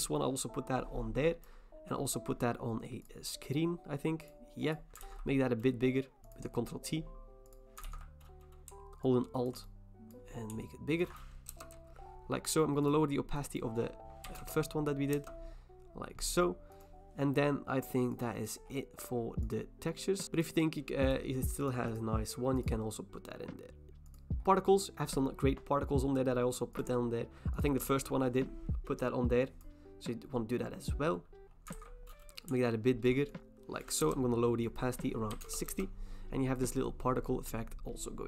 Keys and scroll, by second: 5.0 ctrl+t, 7.9 ctrl+t, 11.5 Return, 14.0-14.9 typing, 15.1 Return, 16.6-19.1 typing, 31.7 ctrl+t, 34.0 Return, 35.1-35.9 typing.